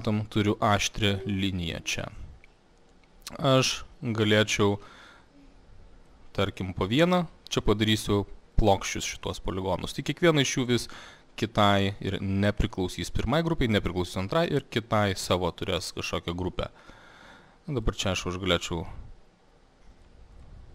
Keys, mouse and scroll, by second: 2.0 alt+middle click, 6.1 click, 6.7 click, 7.7 click, 8.2 click, 8.7 click, 9.3 click, 10.8 click, 12.7 click, 14.5 click, 15.3 click, 16.0 click, 16.7 click, 16.9 click, 17.9 click, 18.9 click, 20.1 click, 20.5 click.